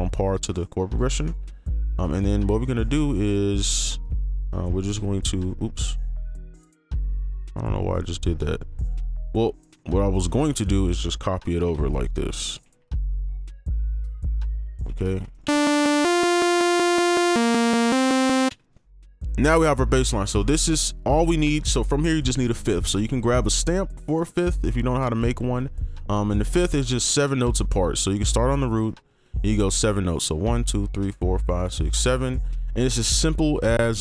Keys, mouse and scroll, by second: 1.2 right click, 2.2 ctrl+a, 2.6 right click, 3.1 ctrl+click, 5.0 ctrl+b, 5.9 right click, 6.7-8.3 scroll down 1, 8.3 double click, 10.7 ctrl+click, 11.6 ctrl+b, 12.1 ctrl+click, 12.6 ctrl+b, 12.9 ctrl+b, 13.1 ctrl+b, 13.2 ctrl+b, 13.7 ctrl+click, 14.4 ctrl+b, 14.5 ctrl+click, 15.3 right click, 18.5 space, 21.4 right click, 25.1 double click, 27.7 right click, 28.6 ctrl+click, 30.2 shift+u, 30.5 shift+Up, 30.6-32.0 shift+Up.